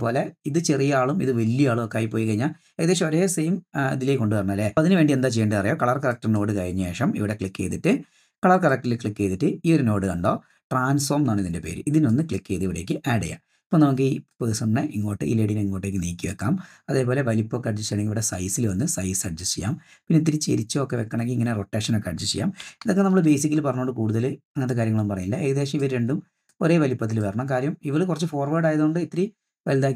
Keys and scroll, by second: 22.9 super+z, 23.1 super+z.